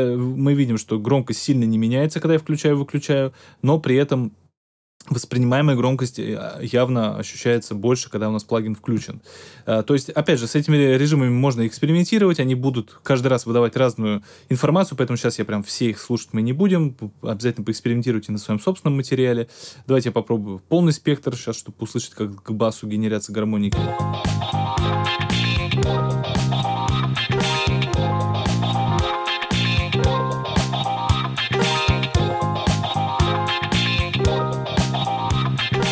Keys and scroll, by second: 23.6 space.